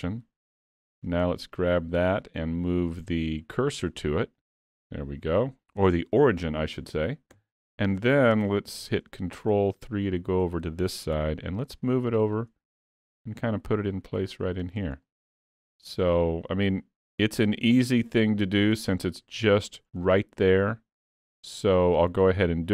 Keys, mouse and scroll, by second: 0.8 alt+a, 1.3 click, 2.7 click, 7.4 KP_3, 8.4 KP_3, 9.5 scroll up 2, 9.8 shift+middle click, 11.1 g, 13.1 s, 15.1 middle click, 16.5 click, 19.0 middle click, 20.1 middle click, 22.0-22.3 scroll up 3, 22.3 middle click.